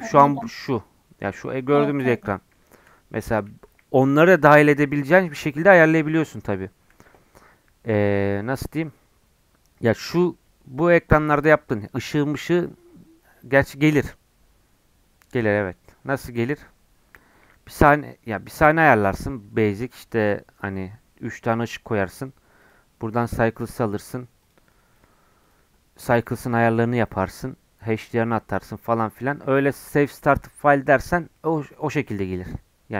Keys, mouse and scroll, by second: 2.2-3.6 middle drag, 3.6 KP_1, 5.1-8.8 middle drag, 17.4 KP_1, 22.6-27.9 drag, 28.5 scroll down 2, 28.7-31.7 middle drag.